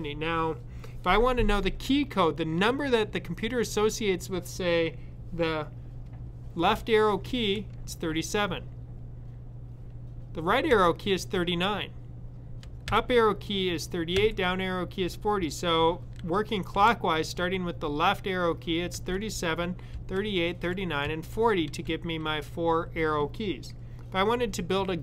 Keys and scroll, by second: 7.0 Left, 10.5 Right, 14.0 Down, 18.8 Left, 20.2 Right, 20.9 Down, 23.2 typing.